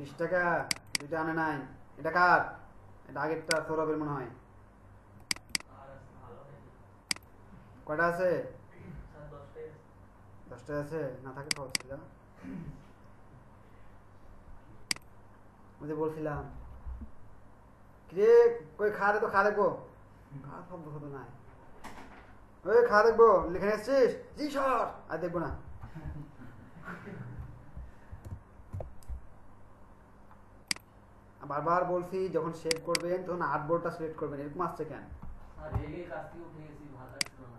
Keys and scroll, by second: 28.2 ctrl+alt+space.